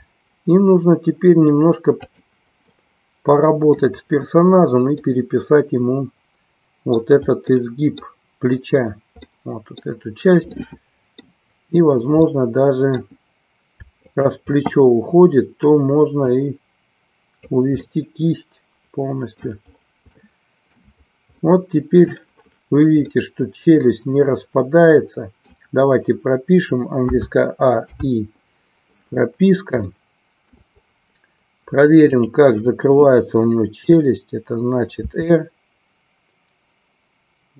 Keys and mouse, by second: 2.2 click, 2.2 g, 2.7-3.8 middle drag, 5.0-7.1 middle drag, 7.7 middle click, 9.2 middle click, 10.4 middle click, 12.3 middle click, 13.9 shift+click, 16.3-17.6 drag, 17.9-19.5 middle drag, 20.3 shift+middle click, 21.5 middle click, 23.1-25.7 middle drag, 29.8 shift+middle click, 32.1 click.